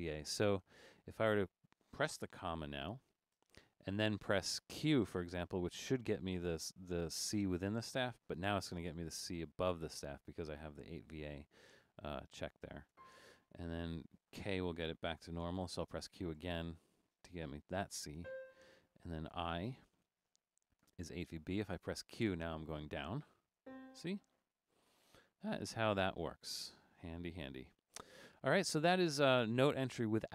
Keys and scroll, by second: 3.3 ,, 9.2 q, 13.0 5, 15.5-16.4 typing, 18.3 5, 20.9 i, 22.1 q, 23.6 5, 25.1 k, 26.6 q.